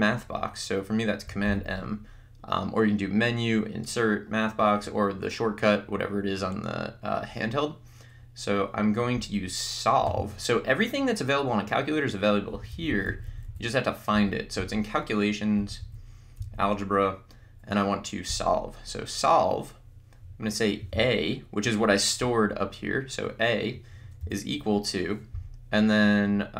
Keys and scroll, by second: 1.9 m, 10.2 Menu, 12.6 Down, 14.3 Up, 14.8 Right, 15.8 Down, 16.7 Right, 18.3 Return, 20.9 a, 24.2 =.